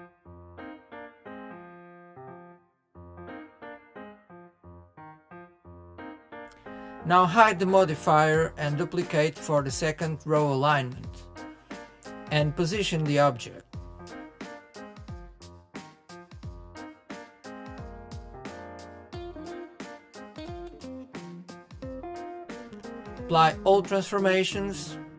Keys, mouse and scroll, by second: 0.1 scroll down 3, 0.4-1.9 middle drag, 2.2-3.1 shift+middle drag, 3.1 click, 4.6 click, 5.3 KP_3, 5.8-6.2 scroll up 3, 6.2-7.2 shift+middle drag, 7.2 click, 7.8 shift+d, 12.6-14.0 drag, 16.8 click, 18.1 click.